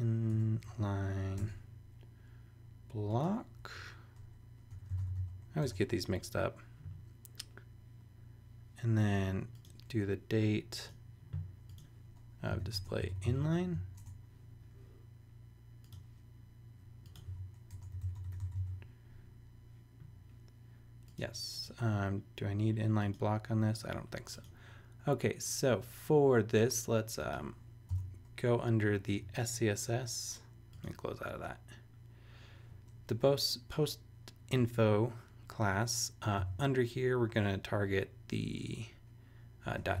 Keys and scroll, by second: 0.0-0.6 typing, 1.4 Tab, 3.7 Right, 4.5-5.6 typing, 12.3-14.0 typing, 17.2-19.0 typing, 27.9 Return, 36.4 ., 39.4-40.0 typing.